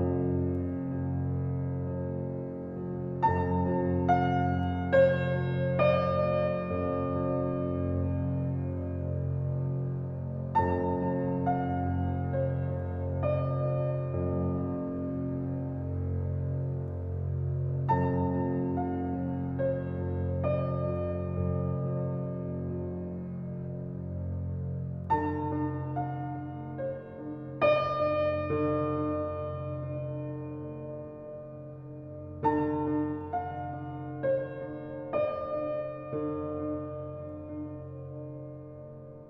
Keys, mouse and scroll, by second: 0.2 scroll down 1, 0.9-3.9 middle drag, 4.2-4.8 scroll up 1, 4.8 drag, 9.9 click, 10.7 click, 11.7 g, 14.6 ctrl+z, 16.6 click, 17.9 s, 19.6 click, 19.9 s, 21.3 click, 21.5 s, 23.1 click, 23.4 s, 25.2 click, 25.8 drag, 27.6 click, 28.9 s, 32.2 click, 35.0 ctrl+j, 35.5 scroll down 1, 36.8 click, 37.5-38.1 right drag, 38.1 click, 38.5 drag.